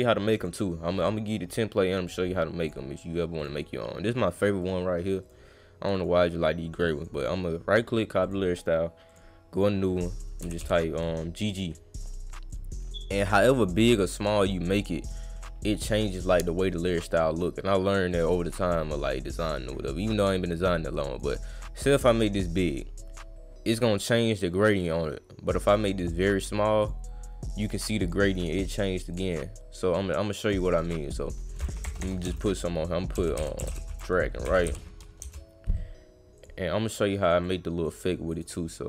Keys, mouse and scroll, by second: 0.4 click, 2.6 click, 3.4 click, 4.6 click, 5.2 click, 6.0 right click, 7.0 click, 8.2 click, 9.1 click, 9.6 click, 10.4 g, 10.6 g, 11.5 click, 12.5 click, 13.7 click, 14.6 drag, 16.0 click, 16.7 click, 18.1 click, 19.6-21.2 drag, 24.7-26.0 drag, 26.8 click, 27.6 click, 28.0 click, 29.1 click, 30.4 click, 31.1 click, 32.3 Caps_Lock, 32.9-34.2 typing, 36.4 click, 37.2 click, 37.4-37.8 drag, 38.3 click.